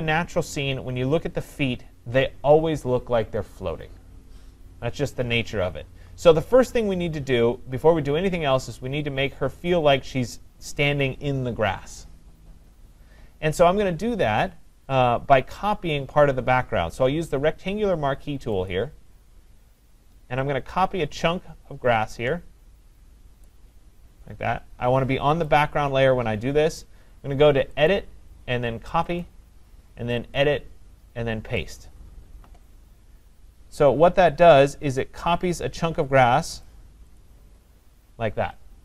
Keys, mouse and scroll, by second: 18.7 click, 23.4 click, 25.5 click, 27.9 click, 29.2 click, 36.7 click, 37.2 click.